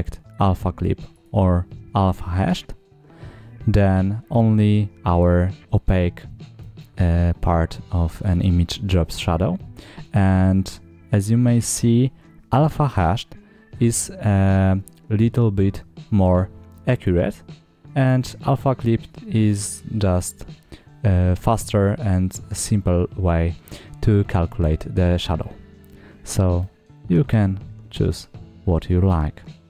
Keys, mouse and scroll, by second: 0.2-1.1 drag, 4.4 scroll up 2, 5.5 scroll down 1, 6.5-8.3 middle drag, 10.1 scroll up 2, 16.8-17.9 drag, 21.7 middle click, 25.1-25.4 scroll up 1, 25.4 scroll down 2, 26.5 middle click.